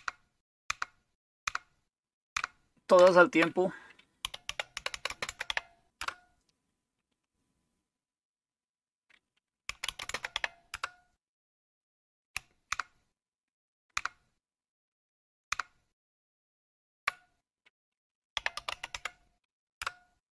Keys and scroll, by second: 0.0 super+Left, 0.7 super+Left, 1.5 super+Left, 2.3 super+Left, 3.0 super+Right, 4.0-6.0 typing, 6.0 Return, 9.5-10.8 typing, 12.8 super+Left, 14.0 super+Left, 15.5 super+Left, 18.1-19.4 typing, 19.8 Return.